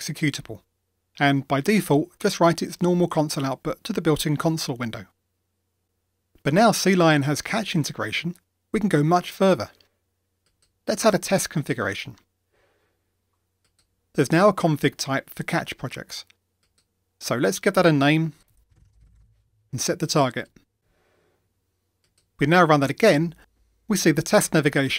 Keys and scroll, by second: 23.0 ctrl+r.